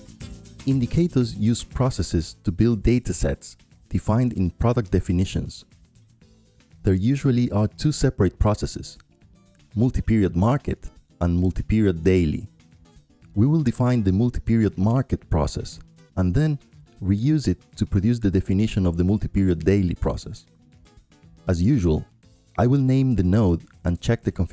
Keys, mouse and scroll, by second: 1.2-2.7 drag, 3.2 click, 4.5 click, 5.1 click, 6.9-8.3 drag, 10.6-12.0 drag, 12.3 click, 13.3-14.7 drag, 14.9-16.4 drag, 17.4 click, 18.4-21.0 drag, 21.5 click, 24.0 click.